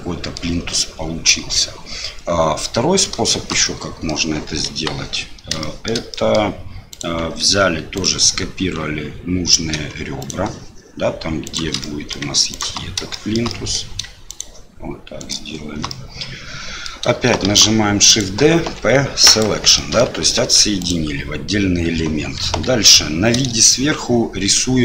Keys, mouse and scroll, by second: 3.2 shift+middle click, 3.6 middle click, 4.7 Delete, 5.6 shift+middle click, 6.1 middle click, 6.9 click, 7.4 Tab, 7.9 click, 10.2 shift+click, 11.4 shift+click, 11.8 middle click, 12.5 shift+click, 13.1 shift+middle click, 13.5 middle click, 14.3 shift+click, 15.2 shift+click, 15.9 middle click, 17.4 shift+d, 18.6 p, 19.8 middle click, 20.2 Tab, 20.8 click, 22.4 KP_7.